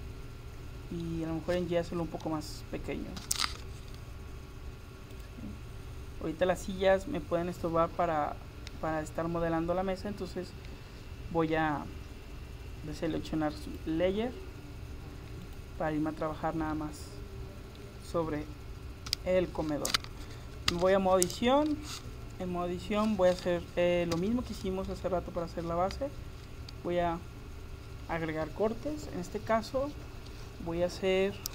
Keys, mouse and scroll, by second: 3.2 s, 13.7-17.4 drag, 17.4-18.4 middle drag, 19.1 KP_7, 20.8 Tab, 24.2 a, 25.4-27.2 middle drag, 27.3 middle click.